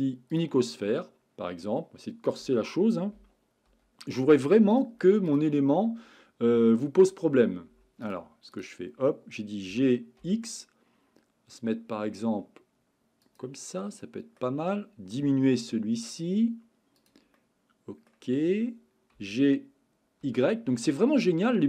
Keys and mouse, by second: 3.7 Right, 5.3 click, 7.0 Right, 8.0 click, 9.7 g, 12.8 x, 13.2 click, 13.7-14.4 middle drag, 15.3 s, 17.3-18.1 middle drag, 19.1 g, 20.2 y.